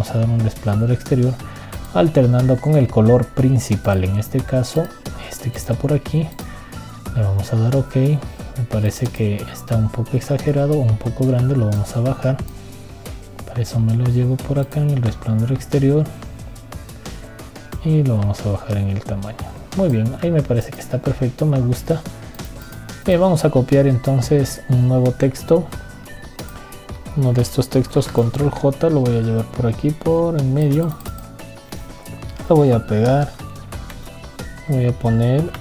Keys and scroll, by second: 28.7 ctrl+j.